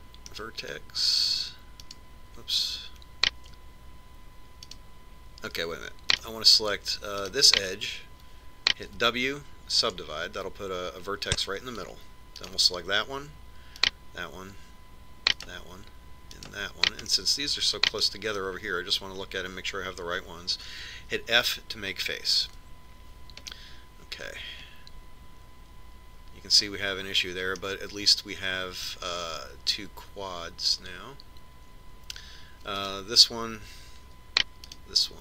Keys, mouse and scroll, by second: 3.2-4.9 right drag, 6.0-10.5 right drag, 10.3 w, 13.8-19.5 right drag, 18.5-20.3 middle drag, 24.0 f, 24.9-26.8 middle drag, 29.1-30.8 middle drag, 34.3-35.2 right drag.